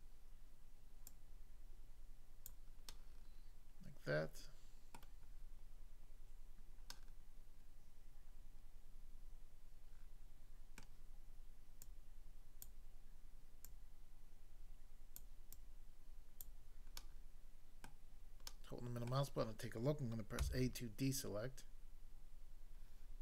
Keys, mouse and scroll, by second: 1.1 click, 2.5 click, 2.8 middle click, 4.9 middle click, 6.9 middle click, 10.8 middle click, 11.8 click, 12.7 click, 13.6 click, 15.2 click, 15.6 click, 16.4 click, 17.0 middle click, 17.9 middle click, 18.5 middle click, 19.0 middle click, 20.4 a.